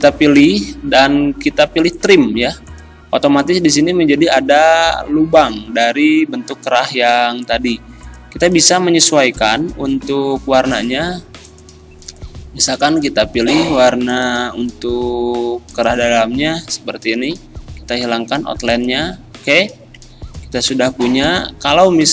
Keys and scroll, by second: 6.4 ctrl+z, 20.6 z.